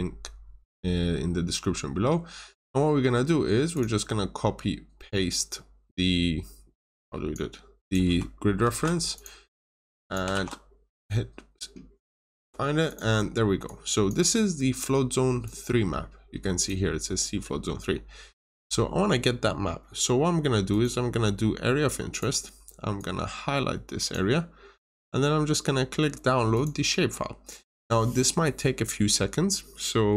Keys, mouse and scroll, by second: 3.7 click, 4.3-5.0 scroll up 1, 5.0 scroll down 1, 5.4 scroll up 1, 6.8 click, 8.5 ctrl+c, 9.0 typing, 9.1 click, 10.3 typing, 10.9 click, 13.2 scroll down 1, 13.6 click, 17.8 scroll up 1, 18.2 scroll down 1, 20.6 click.